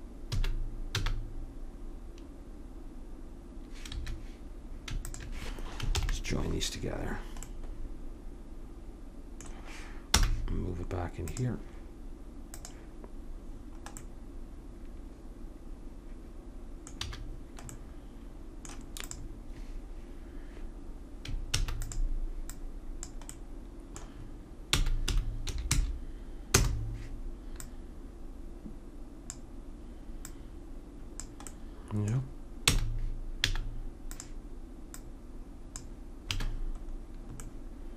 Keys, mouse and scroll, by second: 0.3 s, 5.1 click, 6.0 ctrl+j, 10.1 m, 12.5-14.3 drag, 14.3 middle click, 17.1 a, 19.0-20.8 drag, 21.6 shift+d, 23.4 middle click, 24.7 r, 28.2-29.4 drag, 30.3-31.5 drag, 31.5 middle click, 31.7 click, 32.1 middle click, 32.7 r, 34.9-36.8 drag, 36.3 a.